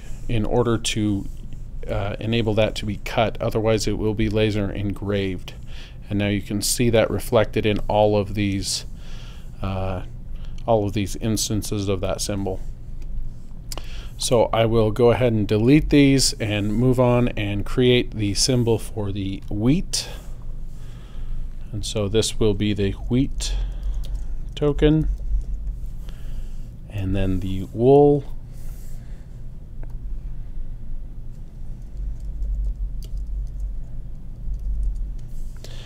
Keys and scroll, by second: 15.7 BackSpace, 22.7-25.7 typing, 31.8-35.1 typing.